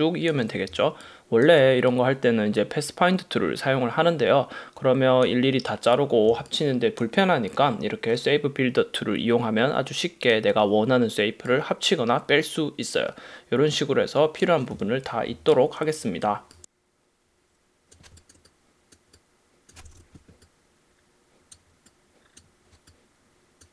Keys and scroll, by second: 0.8 space, 6.4 space, 15.4 space, 18.2 space, 19.9 super+-.